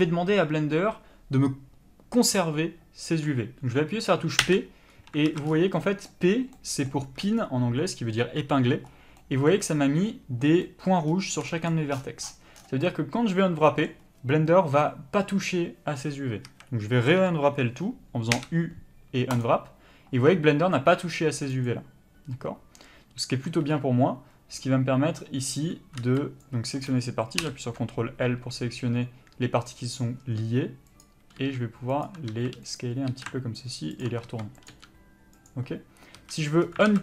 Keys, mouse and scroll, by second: 4.4 p, 5.3 alt+a, 16.5 a, 17.5-19.5 scroll up 1, 19.5 u, 21.7 click, 26.4 b, 27.4 ctrl+l, 30.2 s, 31.0 click, 31.4 g, 32.4 s, 32.7 click, 33.1 r, 34.3 s, 34.7 g, 36.2 a, 36.9 alt+a.